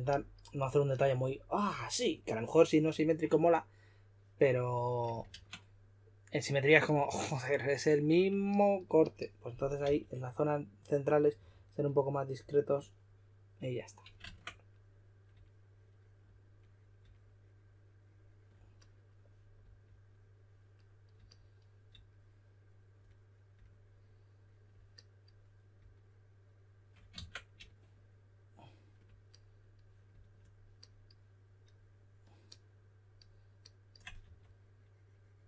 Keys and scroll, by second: 5.3 super+z, 9.8 s, 11.1-11.9 typing, 14.2 super+z, 27.1 super+z, 34.2 5.